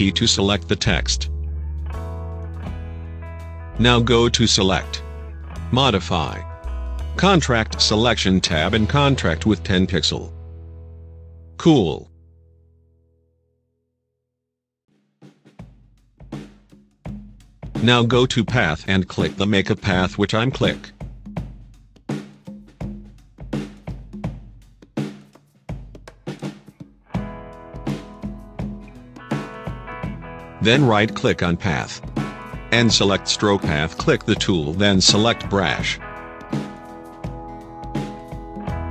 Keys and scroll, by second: 10.8-11.7 typing.